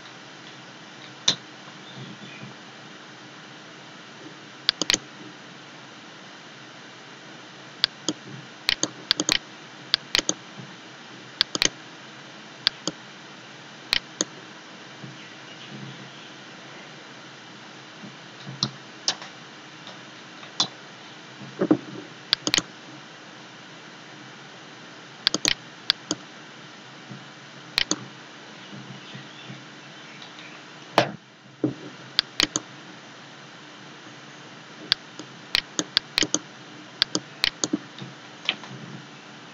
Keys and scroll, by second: 0.0-1.6 typing, 10.4 d, 18.0-21.0 typing, 28.6-30.8 typing, 37.9-39.5 typing.